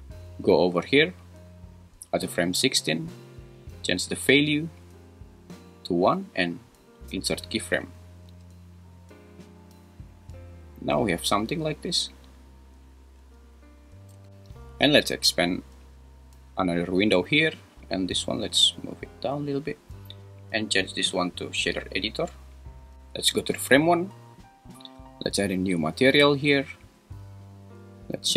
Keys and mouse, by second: 4.3-5.6 drag, 7.1 i, 8.3 space, 13.2 space, 15.5-17.1 drag, 18.7 click, 21.0-22.3 drag, 23.6 shift+Left, 25.8-26.6 drag.